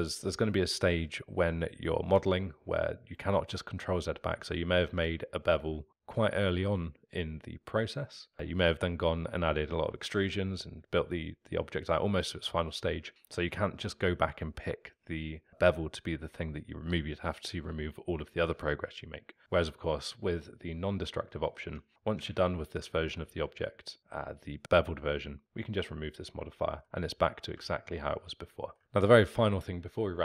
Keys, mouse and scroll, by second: 21.7 Tab, 23.4-25.8 alt+middle drag, 25.8 click, 26.6-30.2 alt+middle drag.